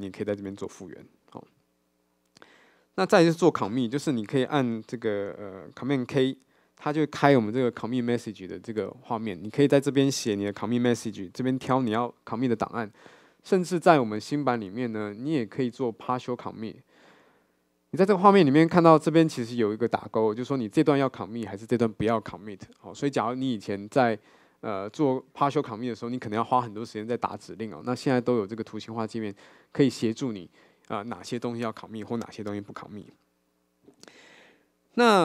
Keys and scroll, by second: 6.1 super+k.